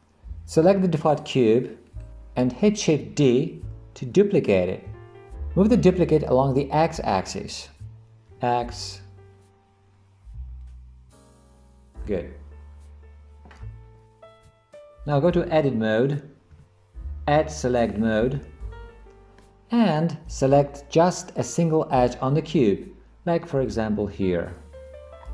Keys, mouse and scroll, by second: 2.0 click, 4.0 shift+d, 14.5 Tab, 16.6 Tab, 18.0 click, 19.4-20.6 middle drag.